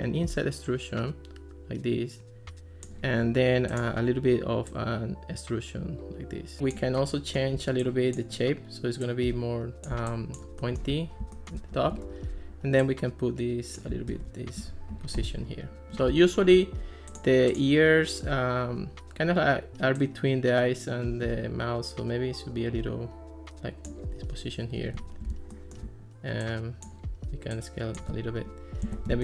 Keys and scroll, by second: 11.9 Escape, 14.1 alt+r, 28.9 super+d.